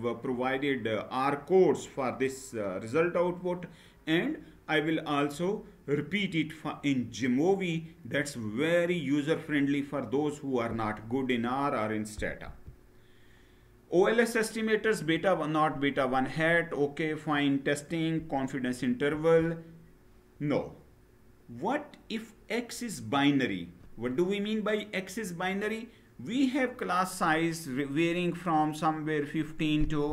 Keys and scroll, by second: 12.2 Right, 18.9 Down.